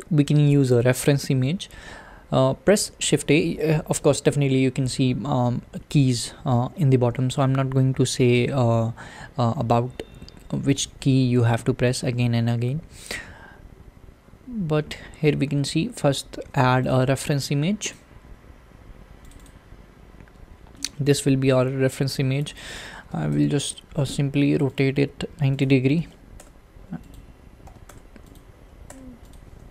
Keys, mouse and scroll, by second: 20.1-20.8 scroll down 5, 20.8-23.3 middle drag, 23.3-29.3 drag.